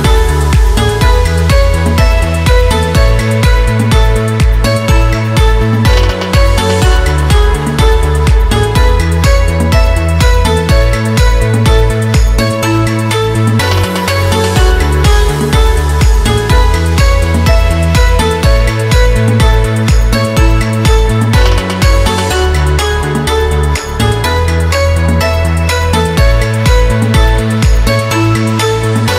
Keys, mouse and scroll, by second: 1.6-3.2 typing, 6.0 scroll down 1, 8.3 scroll up 1, 8.9 space, 9.0 click, 9.4 space, 10.1 scroll up 1, 10.4 space, 10.6 click, 10.9 space, 11.5 click, 13.9 shift+click, 15.5-17.3 drag, 17.0-18.1 typing, 20.0-25.2 drag, 25.2 ctrl+t, 26.0-28.0 drag, 28.0 Return, 28.8-29.1 drag.